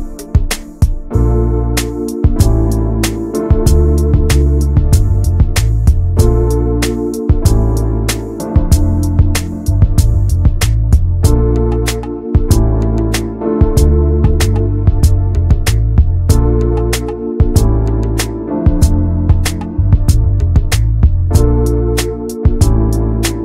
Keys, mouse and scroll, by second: 0.0 click, 0.1 scroll down 3, 0.3 middle click, 0.9 scroll up 1, 1.1 middle click, 1.5 ctrl+s, 1.8 shift+middle click, 2.6 scroll up 1, 4.0-5.1 shift+middle drag, 5.1 scroll up 1, 5.5 Tab, 5.8 click, 6.0-6.5 scroll up 2, 6.5 click, 6.8 alt+shift+click, 7.0 alt+shift+click, 7.5 alt+shift+click, 8.1 scroll down 3, 8.3-9.4 middle drag, 9.4 scroll up 2, 9.9 alt+shift+click, 10.6 alt+shift+click, 10.9 scroll up 1, 11.1 shift+middle click, 11.7 ctrl+b, 15.1 scroll down 3, 15.4 middle click, 15.8 Tab, 15.9 click, 16.3 middle click, 16.7 ctrl+s, 16.9 shift+middle click, 17.4 click, 18.1 middle click, 18.8-19.6 scroll up 1, 19.6 shift+right click, 20.0 shift+a.